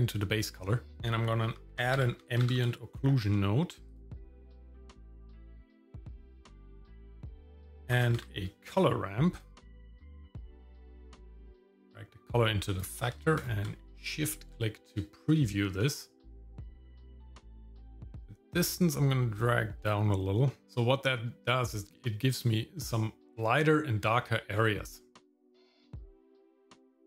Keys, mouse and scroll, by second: 0.5 middle click, 0.9 scroll down 2, 0.9 shift+a, 5.7 click, 7.1 shift+a, 11.9-13.1 drag, 13.4 ctrl+shift+click, 16.7-20.6 shift+drag, 20.6-21.9 shift+middle drag, 23.0 shift+middle click, 24.2 shift+middle click, 26.1-27.0 drag.